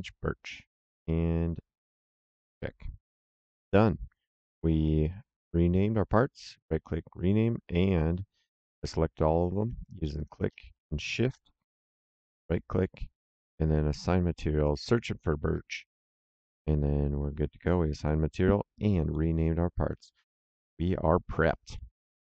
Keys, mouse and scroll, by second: 2.3 click, 5.7 click, 6.0 right click, 10.1 click, 10.9 shift+click, 12.1 right click, 13.9 click, 17.5 click, 19.0 middle click, 20.1 middle click, 22.0 ctrl+shift+l.